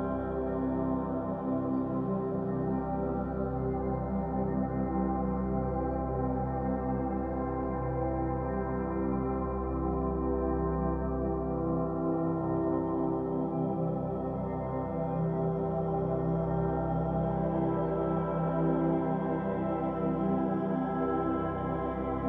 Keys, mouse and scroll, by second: 0.1 g, 1.6-4.6 middle drag, 5.1 middle click, 5.6 scroll down 3, 5.8-8.5 middle drag, 8.5-9.3 scroll up 6, 9.3 click, 9.9 3, 10.1 click, 10.4 shift+click, 10.7 shift+click, 11.0 middle click, 11.6 shift+click, 11.9 shift+click, 12.3 shift+click, 12.5-14.5 middle drag, 14.5-14.8 scroll up 3, 14.8 middle click, 15.0-15.5 scroll down 2, 17.0 scroll down 4, 17.2 scroll up 1, 17.3-20.3 middle drag.